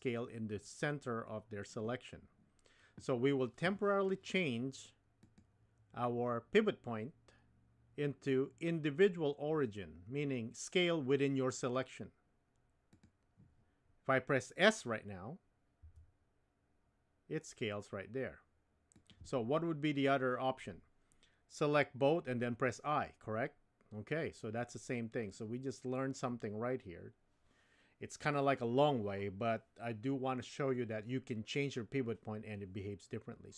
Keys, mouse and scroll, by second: 5.2-13.1 drag, 15.8 s.